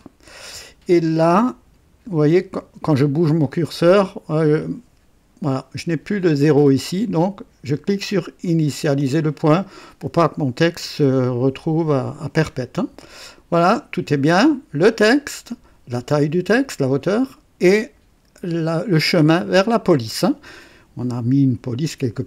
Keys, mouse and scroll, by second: 7.7 click.